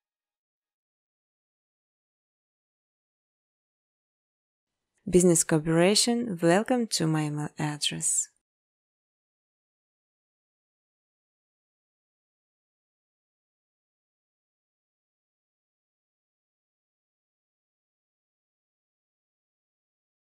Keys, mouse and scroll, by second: 0.0 space, 1.4-3.4 typing, 2.9 middle click, 3.7 middle click, 5.2 click, 5.7 click, 6.2-7.1 typing, 6.9 click, 8.0 click, 8.6-9.3 typing, 9.0 click, 10.5-14.9 typing, 13.1 middle click, 14.1 middle click, 16.1 click, 16.5-20.3 typing, 17.2 click.